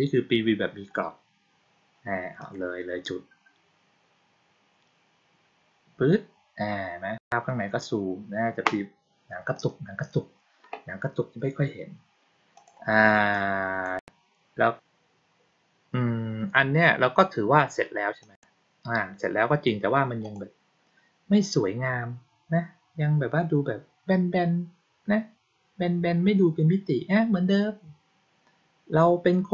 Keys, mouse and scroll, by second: 2.3 click, 9.5 click, 12.5 click, 13.2 click, 18.1 click, 20.1 click.